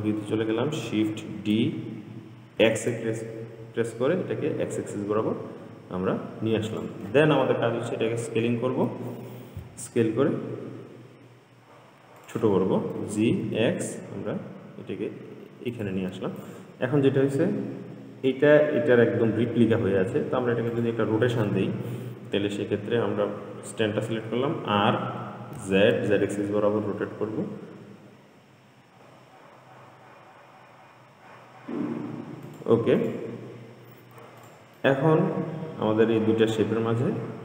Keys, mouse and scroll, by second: 1.5 shift+d, 8.3 s, 13.2 g, 16.6 click, 17.3-19.5 scroll up 5, 20.9 click, 24.6 r, 33.2 click, 33.7-34.6 scroll down 4, 34.6 click, 35.0-37.4 middle drag.